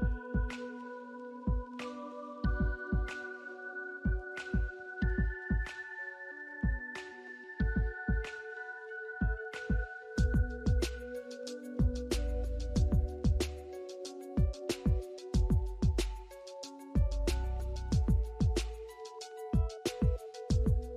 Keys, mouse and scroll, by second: 0.1-0.6 scroll up 1, 3.8 scroll down 1, 4.7 alt+middle click, 5.2-5.9 alt+scroll up 3, 5.4 alt+middle click, 7.8 scroll up 1, 7.8 alt+middle click, 10.8 double click, 11.5 scroll down 1, 13.3 double click, 14.0 scroll down 1, 14.3 alt+middle click, 14.5 alt+scroll up 1, 17.5-18.0 alt+scroll up 2, 18.3 alt+middle click, 19.0 scroll down 1, 19.7 ctrl+click, 20.7 middle click.